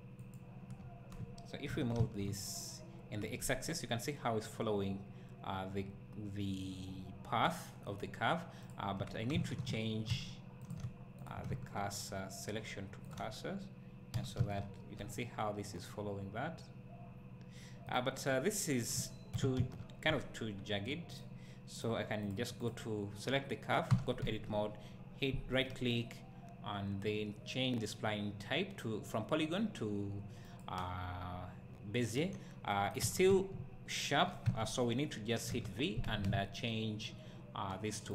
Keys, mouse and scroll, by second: 0.2 click, 0.8 `, 1.7 g, 8.7 click, 10.7 shift+s, 11.3 click, 13.1 shift+s, 14.1 g, 17.9 right click, 18.3 scroll up 1, 18.9 scroll down 1, 19.3 g, 21.1 click, 23.9 Tab, 24.3 `, 30.5-38.1 right drag, 31.2-32.3 scroll up 2, 32.3-32.7 scroll down 2, 33.0 Tab, 33.3 `, 34.5 Tab.